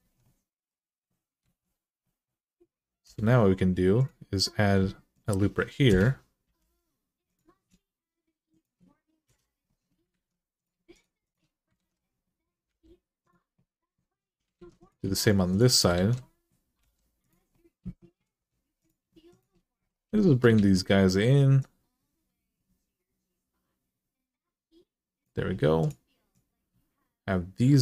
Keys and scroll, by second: 1.2 alt+z, 2.8 k, 5.7 Return, 6.2 k, 9.0 Return, 9.9 alt+z, 11.6 alt+z, 12.5 g, 14.3 alt+z, 15.7 alt+z, 16.6 g, 20.3 alt+z.